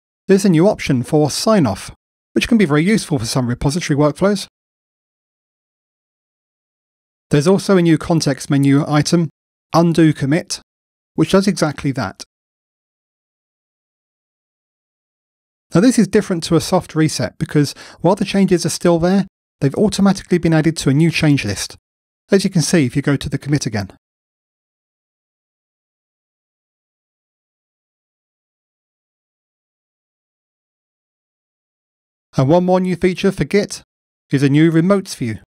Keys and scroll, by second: 33.4 shift+super+a.